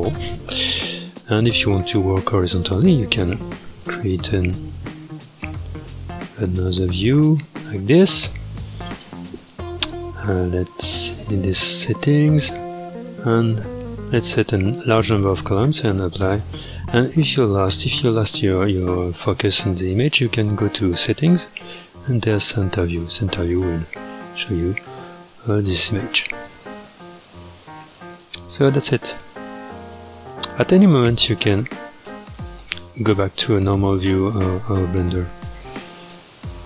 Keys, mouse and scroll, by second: 5.4-8.4 drag, 8.4-9.1 scroll down 10, 9.1-9.5 scroll up 4, 11.0 click, 11.6-12.1 scroll down 5, 12.2-13.2 scroll up 3, 13.2-17.5 drag, 17.5-18.1 scroll down 4, 21.1 click, 21.6-22.0 scroll down 4, 22.4-23.5 drag, 23.5 scroll, 24.3 click, 24.8-25.1 scroll, 26.2-30.3 shift+middle drag, 32.3-33.9 drag, 35.3 KP_Decimal, 36.4-36.6 middle drag.